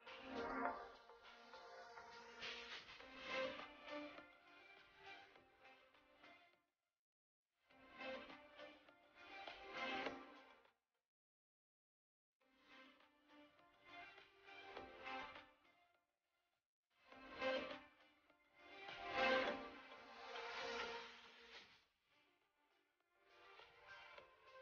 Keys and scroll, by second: 2.1 shift+space, 3.9 shift+space, 12.6 shift+space, 17.0 shift+space, 20.8 shift+space.